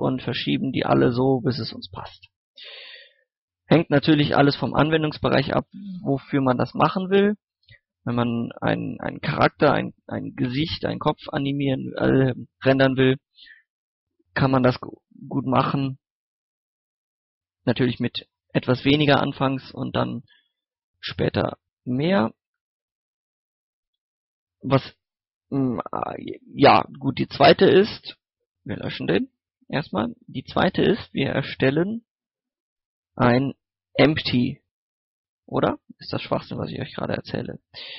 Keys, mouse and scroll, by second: 0.1-5.6 typing, 0.4 click, 0.7 right click, 1.0 click, 1.3 right click, 1.6 click, 2.0 right click, 2.2 click, 2.5 right click, 3.0 click, 3.3 right click, 3.7 click, 4.0 right click, 4.8 right click, 5.3 click, 5.8 middle click, 6.2 right click, 6.9 middle click, 7.4 scroll up 1, 7.7-10.6 middle drag, 11.6 scroll down 1, 11.8 scroll up 1, 12.1 middle click, 12.4-12.9 scroll up 1, 12.9 middle click, 13.6 shift+middle click, 14.5 right click, 14.8 g, 15.1 click, 15.5 right click, 15.7 g, 16.3 g, 16.6 click, 16.9 middle click, 19.1 scroll down 1, 19.4 middle click, 20.5 right click, 20.7-22.0 typing, 21.0 click, 21.2 right click, 22.5 right click, 24.9 Tab, 27.8 x, 28.8 click, 30.0 shift+a, 34.4 click, 35.2 middle click, 35.5 Tab, 36.5 ctrl+click, 37.3 ctrl+click.